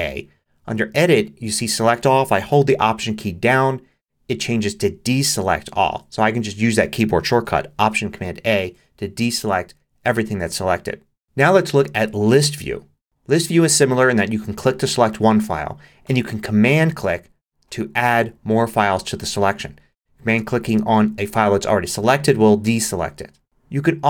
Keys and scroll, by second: 8.4 alt+super+a.